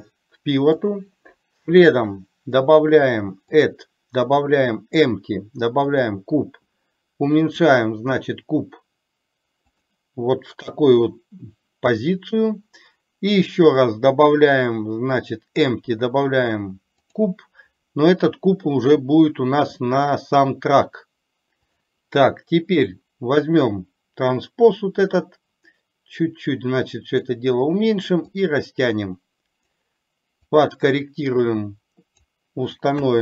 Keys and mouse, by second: 0.9-3.2 drag, 3.7-6.2 drag, 13.9-17.4 drag, 25.2 click, 25.5-27.3 drag, 28.4-29.6 drag, 30.6-32.4 drag, 33.0 KP_1.